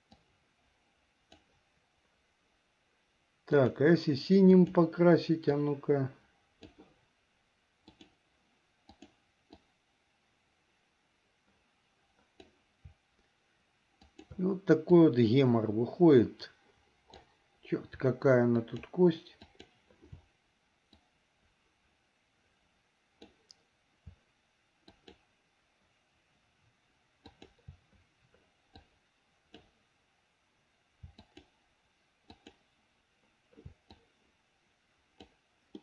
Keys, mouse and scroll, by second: 0.4-1.6 drag, 3.6-4.9 drag, 5.7-7.0 drag, 7.9-9.3 drag, 9.8-12.6 drag, 14.1 shift+click, 15.1-17.4 drag, 18.8 shift+click, 19.7 shift+click, 21.1-23.5 drag, 25.0 shift+click, 27.4 shift+click, 28.9 click, 31.3 shift+click, 32.4 shift+click, 34.1-35.4 drag.